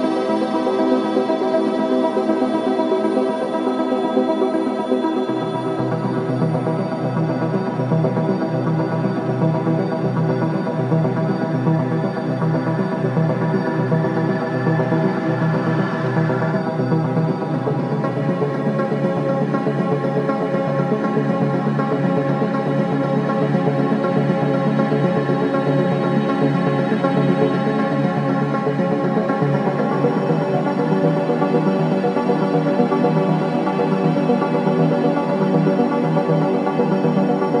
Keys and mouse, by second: 4.0 i, 5.0 click, 5.8 click, 7.9 click, 9.0 shift+d, 9.8 click, 10.5 s, 10.7 x, 11.3 -, 11.7 1, 12.7 Return, 13.1-14.8 typing, 13.8 click, 14.5 click, 17.0-17.8 typing, 18.5 click, 19.1 click, 19.4 space, 22.0 click, 22.1-22.8 typing, 27.7 space, 28.5 click, 29.3 space, 33.4 space, 33.9 click, 35.2-36.6 drag.